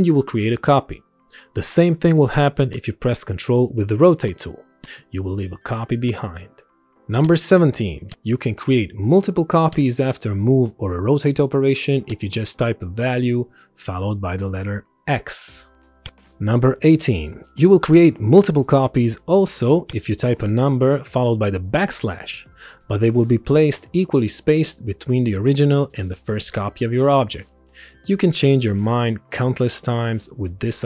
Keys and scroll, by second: 8.9 ctrl+shift+x, 13.4 5, 13.7 x, 14.7 Return, 21.4 5, 22.6 shift+7, 23.6 Return, 25.9 7, 26.4 shift+7, 27.3 Return, 28.8 3, 29.6 shift+7, 30.3 Return.